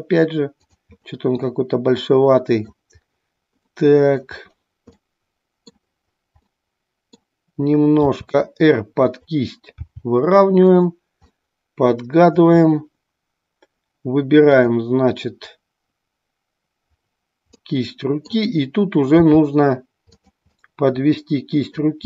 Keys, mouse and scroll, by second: 1.0-2.7 middle drag, 3.7 middle click, 5.1-6.0 middle drag, 6.5-7.4 middle drag, 8.1 r, 9.2 click, 9.7 g, 10.7 click, 11.4-12.3 middle drag, 17.6 middle click, 19.2 g, 20.2 click, 20.6-21.9 middle drag.